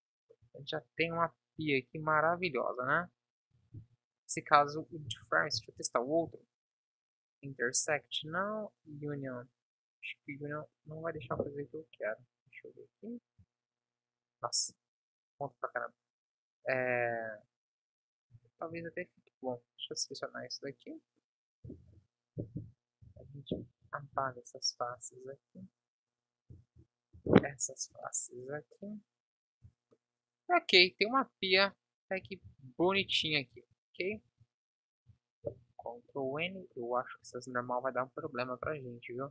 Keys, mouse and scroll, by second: 0.4 z, 3.7 ctrl+z, 11.1 Delete, 13.4 Tab, 16.9-18.2 middle drag, 17.3 KP_1, 18.2 z, 21.6 Delete, 22.5 Up, 23.1 Down, 24.1 z, 26.4 Delete, 29.6 Tab, 32.1 a, 32.8 ctrl+n, 33.5 Tab, 34.3 a, 35.4 ctrl+n, 35.9 Tab.